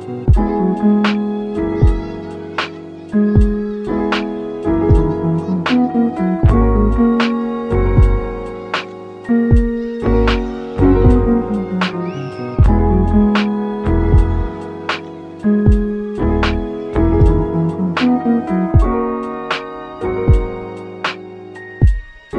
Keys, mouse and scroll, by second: 1.5 click, 2.2 shift+middle click, 2.9 shift+click, 3.7 click, 4.2 shift+middle click, 4.6 g, 5.7 click, 6.2-8.7 shift+middle drag, 6.9 click, 8.7 click, 9.4-9.8 scroll down 2, 9.8 shift+middle click, 10.2 shift+scroll up 2, 10.5 g, 13.2 click, 13.4 double click, 13.5 click, 13.8-14.1 scroll up 1, 14.4 click, 14.5 click, 14.8 g, 15.3 click, 15.8 double click, 16.1 g, 17.3 click, 17.4 g, 18.0 click, 18.6 double click, 18.6 g, 19.7 shift+middle click, 20.1-20.5 scroll down 1, 20.5-21.9 shift+middle drag, 21.9 click.